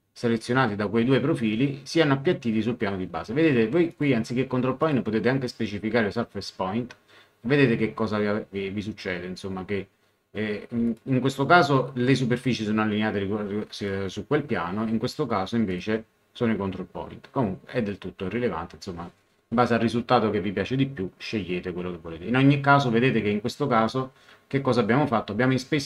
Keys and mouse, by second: 3.9 click, 10.9 click, 13.7 click, 15.7 click.